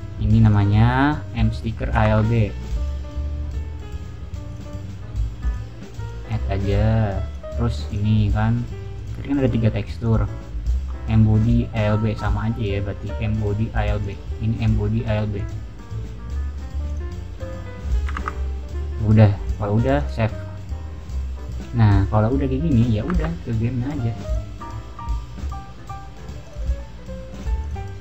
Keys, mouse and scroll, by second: 0.3 click, 2.1 alt+Tab, 2.7 click, 2.9 click, 4.4 click, 4.6 click, 5.3 click, 5.9 click, 7.2 click, 7.8 click, 8.9 click, 9.9 click, 11.8 middle click, 13.9 click, 15.3 click, 16.0 middle click, 16.8 click, 18.1 alt+Tab, 19.3 click, 19.9 click, 22.7 click, 23.1 Tab, 24.2 click, 25.3-26.1 drag, 26.3 click, 26.5 click, 27.3 click, 27.5 click.